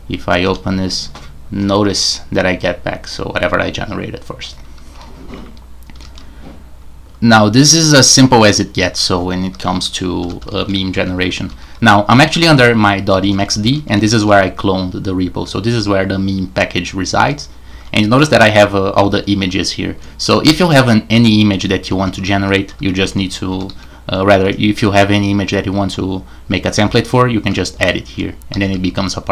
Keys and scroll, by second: 0.0-0.9 typing, 4.9 super+f, 5.9 super+q, 10.2-14.0 typing, 17.2-17.7 typing, 19.1-24.2 typing, 26.9 j, 27.3-28.0 j, 28.5 j, 28.7 j.